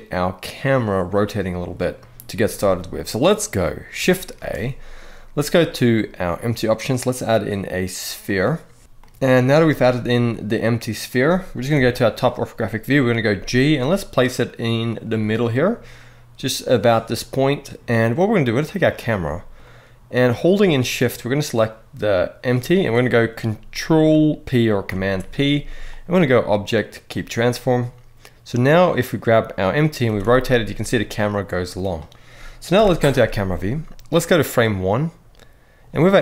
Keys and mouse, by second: 1.3-2.0 middle drag, 2.4-2.9 middle drag, 4.1 shift+a, 8.8-9.1 middle drag, 11.4 KP_7, 13.0 g, 14.6 click, 15.1-17.5 middle drag, 18.4 click, 18.9-19.8 middle drag, 21.4 shift+click, 24.6 ctrl+p, 28.5 click, 29.8 r, 30.0 r, 31.5 right drag, 32.5 KP_0, 34.1 click.